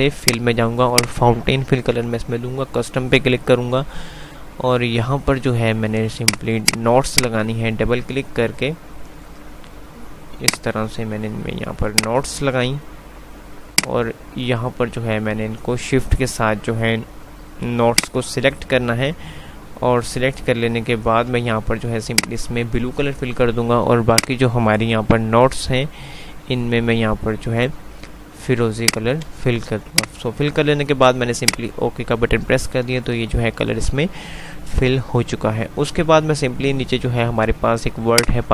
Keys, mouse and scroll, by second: 0.5 click, 34.0 F3, 38.2-38.5 drag.